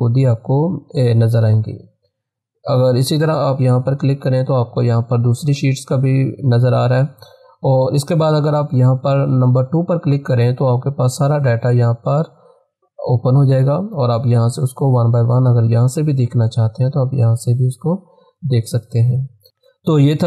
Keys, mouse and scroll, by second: 2.9 click, 9.5 click, 9.8 click, 10.6 scroll down 1, 11.7 scroll up 1, 12.5 scroll up 1, 14.5-15.1 scroll down 1, 16.0-16.3 scroll up 1, 18.1 click.